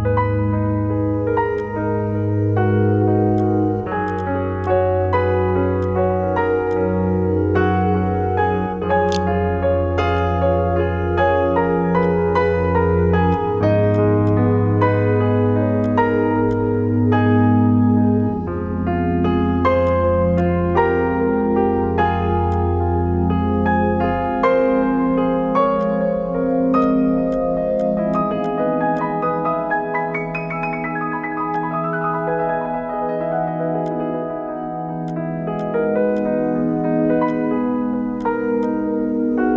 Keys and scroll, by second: 8.1-9.1 typing, 9.3 ctrl+g, 39.2-39.5 typing.